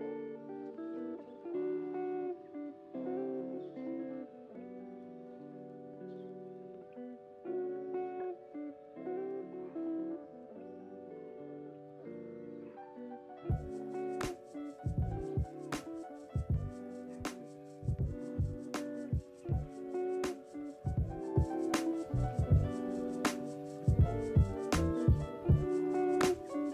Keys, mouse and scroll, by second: 0.6 click, 1.3 ctrl+c, 1.4 ctrl+v, 2.1 click, 2.9 s, 4.5-5.9 middle drag, 5.9 click, 7.0 click, 7.9 click, 8.8-10.4 middle drag, 10.4 click, 11.6 click, 12.6 click, 13.8-16.9 middle drag, 17.8 click, 18.6 click, 19.2 ctrl+c, 19.4 ctrl+v, 20.1 click, 23.0 click, 23.4-26.6 middle drag, 26.6 click.